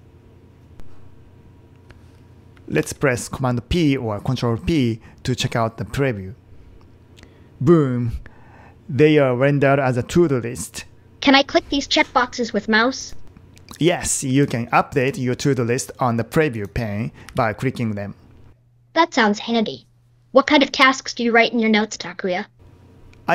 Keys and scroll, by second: 2.8 super+p.